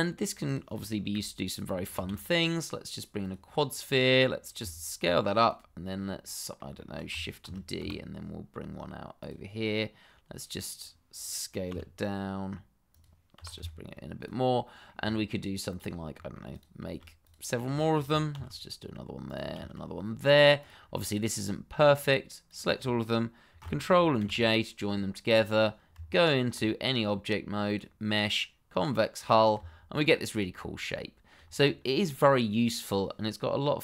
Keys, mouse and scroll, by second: 0.4 click, 1.9 shift+a, 3.2 click, 3.6-4.6 scroll down 1, 4.6 s, 5.4 click, 5.9-6.2 scroll down 1, 6.2 middle click, 6.7 shift+middle click, 6.8 middle click, 6.9 shift+middle click, 7.4 shift+d, 7.8 y, 9.2 click, 9.6 middle click, 11.7 s, 12.9 click, 13.3 g, 14.2 click, 14.6 middle click, 15.7 click, 16.1 shift+middle click, 16.2 middle click, 16.3 shift+middle click, 17.2 click, 17.5 scroll down 1, 17.7 shift+middle click, 18.3 shift+d, 19.2 click, 19.5 shift+d, 20.6 click, 21.1 middle click, 22.0 click, 25.1 shift+middle click, 25.9 Tab, 27.6 click, 29.5 Tab, 30.3 click, 30.6 middle click, 31.7-32.2 scroll up 1, 32.6 middle click.